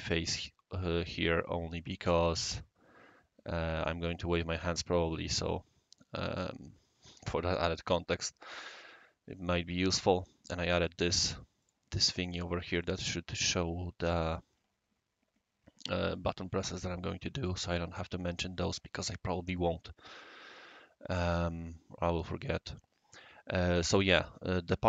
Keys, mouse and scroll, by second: 11.1 drag, 11.6 click, 11.9 click, 12.2 click, 12.7 click, 12.8 click.